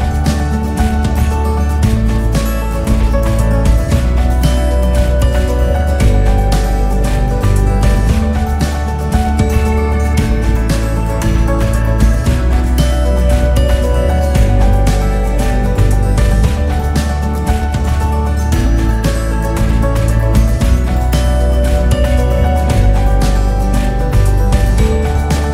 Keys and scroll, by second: 0.7 ctrl+s, 24.1 Return.